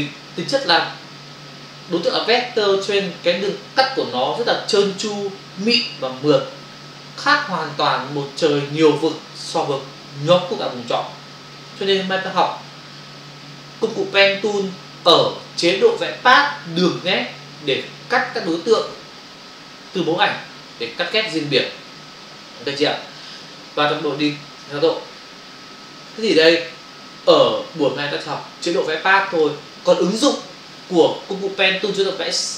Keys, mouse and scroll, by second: 24.3 ctrl+Return, 24.6 ctrl+d, 26.1 Delete, 29.3 click, 29.4 click.